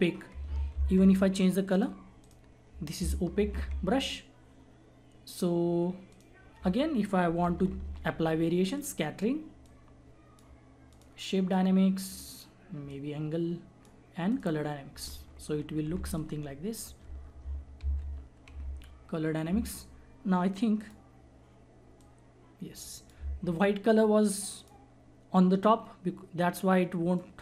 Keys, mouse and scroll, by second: 0.7 z, 1.7 click, 3.9 ctrl+z, 6.0 click, 7.3-7.8 typing, 8.7-14.3 drag, 10.0 click, 10.2 click, 11.8 click, 15.1 [, 15.9 [, 16.1-17.9 drag, 17.9 ctrl+z, 20.8-24.6 drag, 27.2 click.